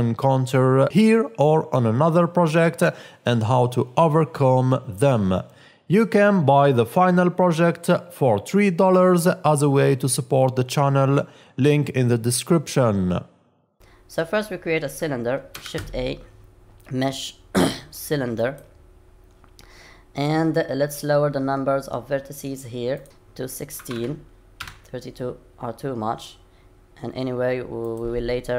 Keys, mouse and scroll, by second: 0.0-0.3 scroll up 2, 0.5 click, 0.6 KP_0, 1.4 middle click, 1.6 middle click, 1.9 click, 2.2 click, 2.3 click, 2.4 click, 2.8 middle click, 3.1 click, 3.1 middle click, 3.4 scroll down 3, 3.5 click, 14.0 middle click, 14.0 scroll down 9, 15.6 shift+a, 19.4-20.2 scroll down 5, 20.2 scroll down 1, 23.0 click, 27.8 click.